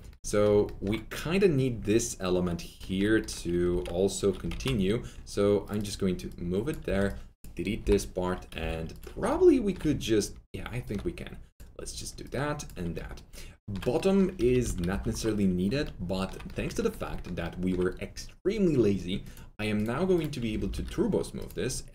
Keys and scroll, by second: 3.6 ctrl+alt+z, 6.8 4, 7.8 Delete, 8.5 3, 14.3 alt+shift+F3, 14.6 F4, 15.7 typing, 20.4-21.1 typing.